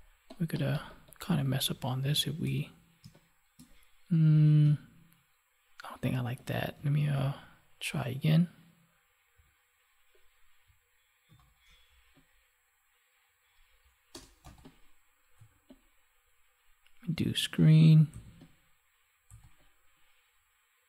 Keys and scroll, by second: 1.7 ctrl+1, 3.0 space, 4.6 Delete, 7.1 ctrl+j, 11.2 ctrl+t.